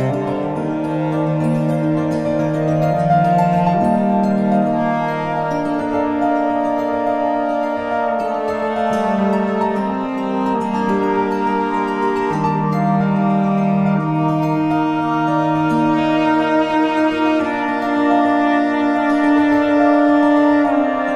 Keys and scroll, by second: 0.1 v, 1.9 Up, 2.1 Right, 2.2 Up, 2.3 Right, 2.6 Left, 3.1 shift+Right, 3.8 Up, 3.9 Left, 5.2 Return, 7.1 F7, 12.8 ctrl+t, 16.0 Page_Down, 16.5 Return, 16.7 Left, 17.1 Up, 17.1 Left, 17.5 Right, 17.9 Down, 18.2 Up, 18.3 Left, 18.5 Return.